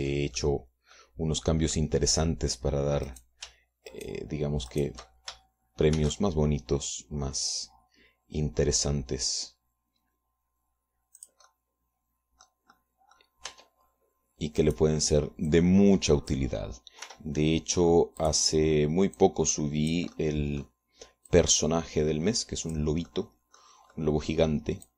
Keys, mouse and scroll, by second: 0.0-1.0 drag, 1.5 Tab, 1.9 click, 3.3 click, 4.6 click, 5.4 shift+right click, 6.2 shift+right click, 7.5 shift+d, 12.8-14.2 drag, 13.0-14.2 right drag, 14.2 middle click, 14.3 click, 14.3 right click, 14.9 middle click, 15.0 Tab, 16.2 click, 17.0-18.0 drag, 18.6 r, 19.8 click, 20.7 click, 21.7 click, 22.8-24.5 drag, 24.6 click.